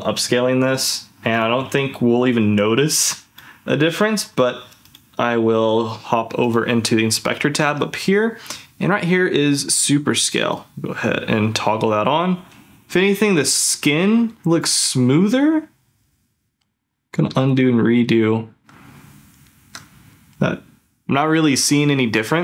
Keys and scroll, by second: 12.8 ctrl+f, 16.5 ctrl+z, 17.3 ctrl+shift+z, 17.8 ctrl+z, 19.5 ctrl+shift+z, 20.1 ctrl+z.